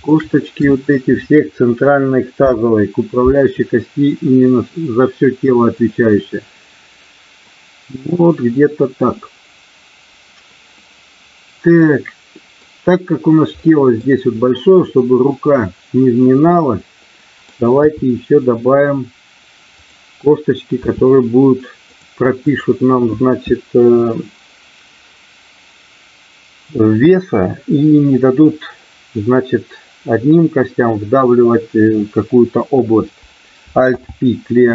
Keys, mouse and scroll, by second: 2.4 ctrl+p, 10.7-12.6 middle drag, 13.6 middle click, 17.0 middle click, 17.9 KP_3, 19.7 click, 20.7 e, 21.9 click, 22.5 click, 33.9 alt+p.